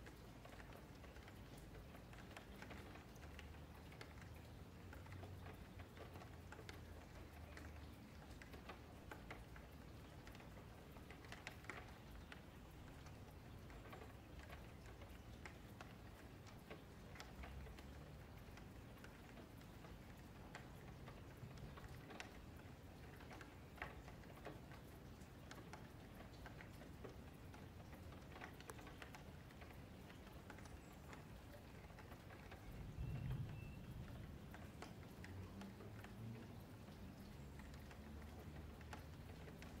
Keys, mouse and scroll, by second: 0.0 scroll up 2, 0.2 alt+q, 0.4-1.8 middle drag, 1.8 scroll up 2, 2.1 click, 2.4 middle drag, 2.6 Tab, 2.8 2, 3.1 alt+click, 3.5-4.6 middle drag, 4.6 f, 5.0-6.7 middle drag, 6.7-7.2 scroll down 1, 7.2 scroll up 2, 7.4 middle click, 8.3 Tab, 8.7 middle click, 9.5 click, 9.8 middle click, 10.2 Tab, 10.8 middle click, 11.3 click, 11.7 Tab, 11.7 click, 11.9 Tab, 12.3-13.7 middle drag, 13.7 F3, 14.2-14.5 scroll down 3, 14.5 shift+middle click, 14.8 g, 16.8 middle click, 17.2 F3, 17.4-18.7 middle drag, 18.7 scroll up 2, 18.9-22.5 shift+middle drag, 22.5 Tab, 22.9 click, 23.2-23.8 scroll up 1, 23.8 shift+click, 25.0 ctrl+j, 25.4 Tab, 25.6 a, 26.6 3, 27.2 click, 27.6 alt+shift+click, 27.9 alt+shift+click, 28.7 shift+click, 29.2 shift+click, 29.6 shift+click, 30.1 shift+click, 30.4 shift+click, 30.7 shift+middle click, 31.1 shift+click, 31.5 shift+click, 32.2-34.3 shift+middle drag, 34.3 alt+shift+click, 34.8 alt+shift+click, 35.2 alt+shift+click, 35.4 alt+shift+click, 35.7 alt+shift+middle click, 35.9-36.4 shift+scroll up 2, 36.4 shift+middle click, 36.7-37.1 scroll up 3, 37.1 3, 38.0 l, 38.3-38.7 scroll down 6, 38.7-39.8 middle drag.